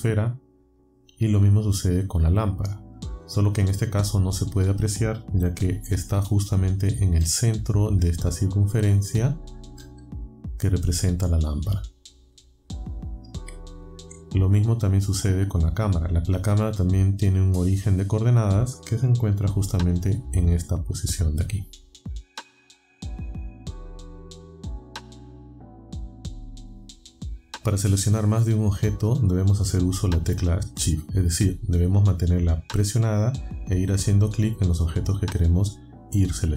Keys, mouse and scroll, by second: 2.8 click, 7.2-7.9 alt+scroll up 4, 9.8-10.4 alt+scroll up 4, 11.7 alt+scroll down 2, 13.0 alt+scroll down 2, 15.1 click, 20.6-22.0 scroll up 7, 22.9-23.2 alt+scroll down 4, 26.2 click.